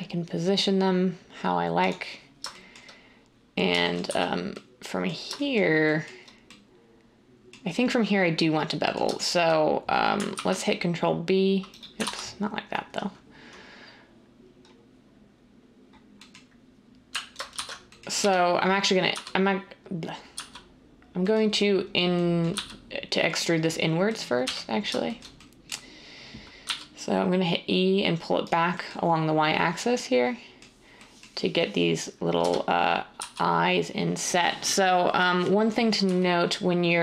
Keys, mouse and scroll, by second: 4.0 z, 10.3 ctrl+b, 12.0 ctrl+z, 17.5 ctrl+shift+z, 18.2-19.1 typing, 20.3 z, 22.5 z, 24.4 1, 26.6 e, 32.4-33.2 typing, 36.0 z.